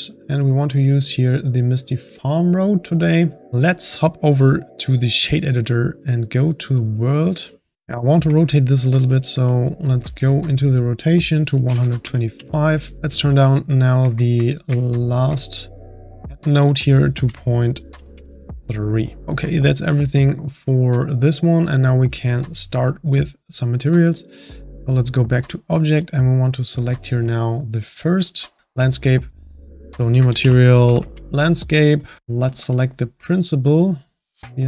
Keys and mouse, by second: 2.4 click, 3.5-19.2 drag, 9.1-10.7 middle drag, 14.8-17.2 ctrl+middle drag, 20.1-25.2 drag, 26.0 click, 28.5 n, 29.3-34.6 drag.